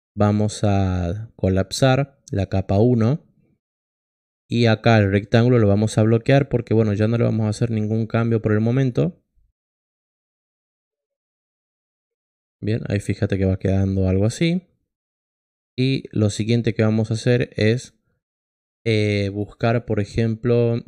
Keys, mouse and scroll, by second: 5.1 click, 7.0 click, 10.2 click, 19.2 click.